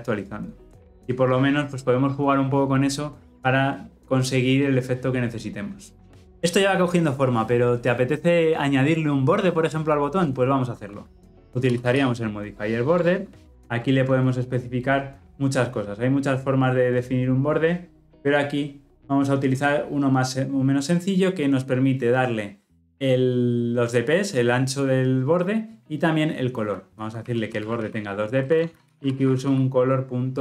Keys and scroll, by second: 12.9 Return, 13.5 ctrl+p.